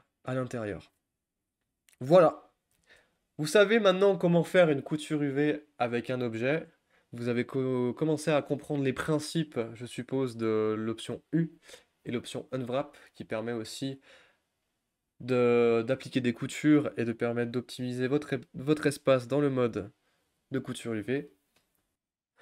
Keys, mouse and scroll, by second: 2.8 Tab, 3.3 click, 3.7-4.1 shift+middle drag, 4.1-6.3 scroll up 2, 6.3-13.0 drag, 13.0 scroll down 1, 13.3-13.7 scroll up 2, 13.7-15.9 scroll down 1, 15.9-21.9 drag, 21.9 a.